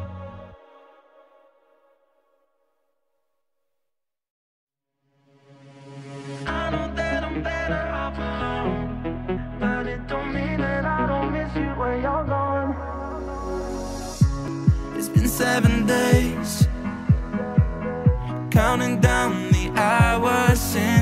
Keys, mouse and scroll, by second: 0.2 middle click, 1.0 click, 1.2 shift+a, 4.0 middle click, 4.5-5.7 drag, 5.7-6.3 middle drag, 6.3-8.0 drag, 8.0 middle click, 8.5 click, 8.6 shift+a, 11.3-12.2 drag, 12.2 middle click, 12.8-14.6 drag, 14.6 middle click, 15.0 scroll up 5, 15.3 middle click, 15.9 click, 16.8 click, 17.2 F7, 17.3 F7, 18.2 middle click, 19.2 scroll up 5, 19.4-21.0 middle drag.